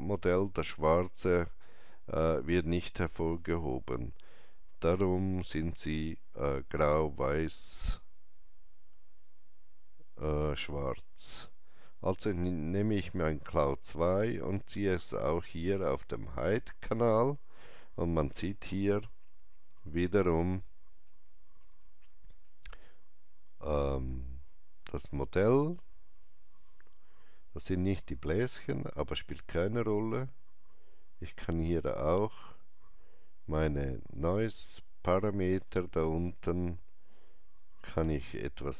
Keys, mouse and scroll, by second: 11.1-18.8 drag, 11.1 typing, 20.4-22.7 drag, 20.4 typing, 20.5 shift+middle click, 21.7 shift+middle click, 22.7 alt+right click, 34.1 click, 34.1 alt+right click, 34.1 alt+middle click, 34.9 scroll down 1, 35.5-37.1 scroll down 1, 37.1-38.7 drag.